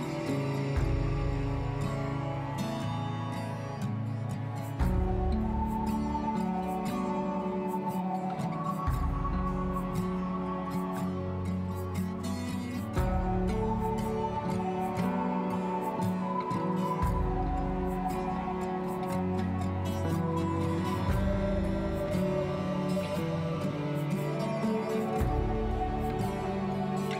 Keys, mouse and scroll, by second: 3.9-5.6 middle drag, 6.8 scroll up 4, 7.0-8.1 middle drag, 8.1-8.5 scroll up 5, 8.5-10.9 middle drag, 9.0 scroll down 1, 10.9-11.2 scroll down 2, 11.2-13.7 shift+middle drag, 17.4-19.0 middle drag, 21.6-23.1 scroll up 1, 26.0 scroll down 2, 26.2-27.1 middle drag.